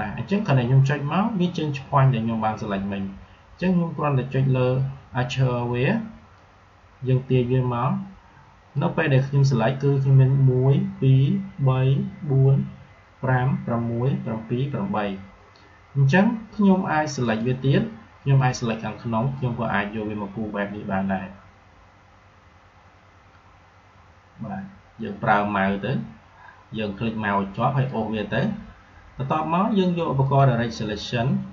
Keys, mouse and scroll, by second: 6.2-11.0 drag, 17.1-29.2 drag, 30.1-31.5 drag.